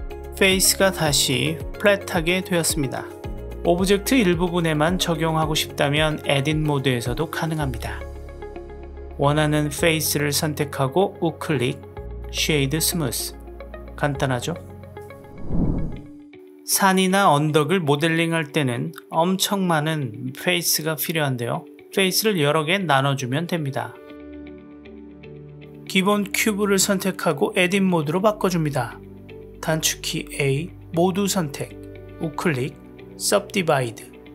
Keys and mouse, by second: 1.4-2.6 middle drag, 5.7 KP_1, 6.8 Tab, 7.9 click, 8.4 click, 8.5 click, 8.7 click, 9.9 middle click, 11.9-13.3 right drag, 13.6 Tab, 13.7-15.6 middle drag, 17.2-18.7 middle drag, 19.0 Tab, 20.1 click, 21.7-24.5 middle drag, 24.8-27.3 middle drag, 28.0 Tab, 31.2 a, 31.5-32.6 middle drag, 32.9-34.3 right drag.